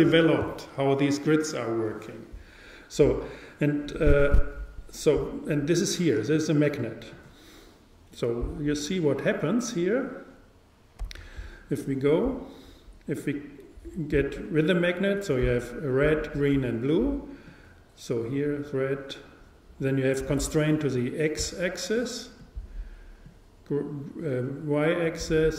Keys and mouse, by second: 6.3-9.2 drag, 11.0 n, 17.5-19.3 drag, 23.3-25.1 drag.